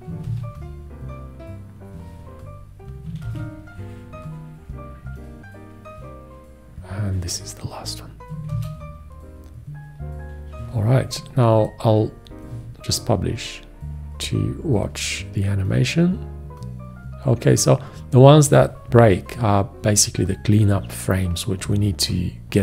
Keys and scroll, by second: 0.5 ctrl+`, 3.5 ctrl+`, 8.7 ctrl+`, 12.5 ctrl+Return.